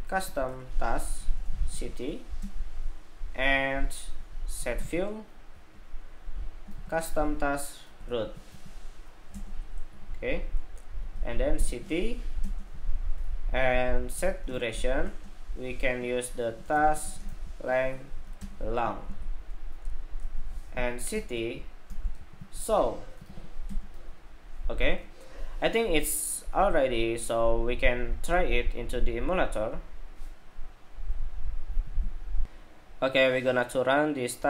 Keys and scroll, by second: 32.1 shift+super+2.